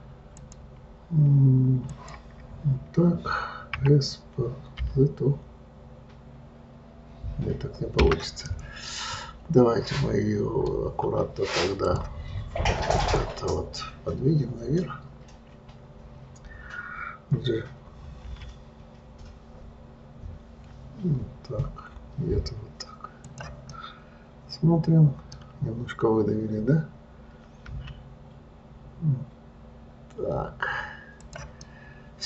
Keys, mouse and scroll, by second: 0.7 click, 2.3 click, 4.1 s, 8.8-11.9 middle drag, 12.2-13.5 drag, 24.1-27.1 middle drag, 32.0-32.2 middle drag.